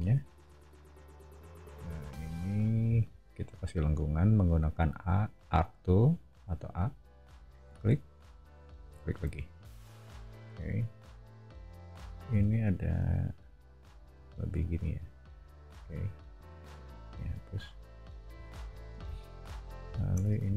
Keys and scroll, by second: 1.1 a, 12.5 l, 16.8 e, 18.3 o, 20.3 space.